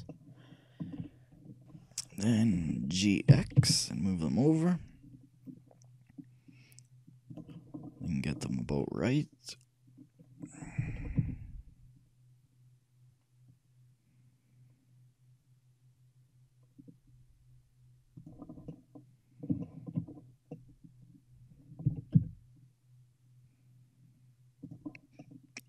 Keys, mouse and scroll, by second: 3.4 g, 7.9 middle click, 9.0-11.0 middle drag, 11.0 g, 18.6-22.4 middle drag, 22.0 shift+g, 25.2-25.6 middle drag.